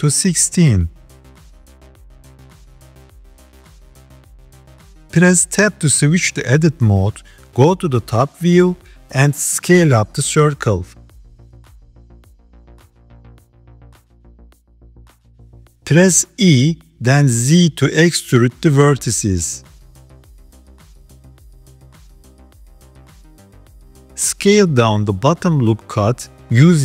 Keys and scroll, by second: 5.7 Tab, 7.2 KP_7, 9.7 s, 15.5 e, 20.2 KP_1, 21.4 g, 24.9 s.